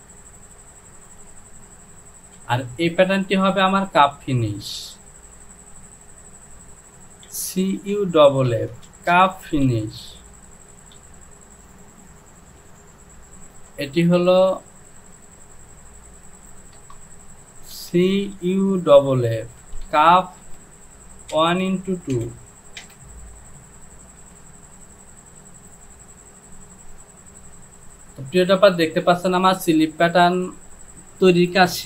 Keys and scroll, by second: 2.4 Home, 5.3 e, 8.5-11.0 typing, 13.5 Home, 16.4 Right, 16.8 BackSpace, 17.8 c, 20.4 space, 21.4 KP_1, 21.7 x, 22.2 KP_2, 22.9 Return, 24.2 j.